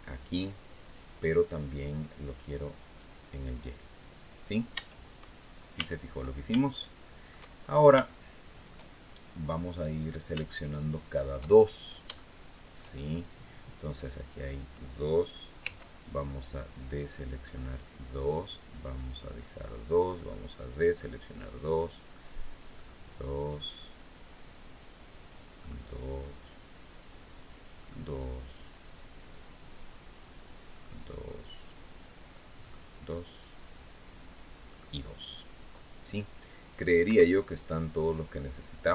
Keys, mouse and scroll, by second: 2.6 click, 4.5 Tab, 5.5 a, 6.4 shift+middle click, 7.3-7.7 shift+scroll up 1, 7.8 shift+middle click, 8.8-9.3 shift+scroll up 3, 9.5-9.8 scroll down 2, 10.1 shift+middle click, 11.5 shift+scroll down 3, 11.9 shift+middle click, 12.8 shift+scroll up 2, 15.4 c, 17.2 click, 19.9 click, 22.5 click, 25.3 click, 27.6 middle click, 30.5 click, 32.4 click, 34.4 click, 36.8 Escape, 37.1-38.2 drag.